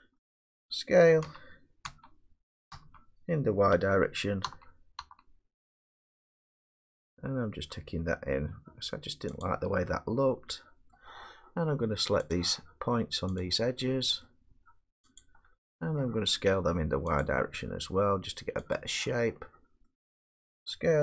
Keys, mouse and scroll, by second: 0.2 middle click, 1.2-5.0 typing, 9.4 click, 10.9 middle click, 12.3 click, 13.4 click, 14.2 middle click, 15.2 shift+click, 16.0 middle click, 17.2 shift+click, 19.8 middle click.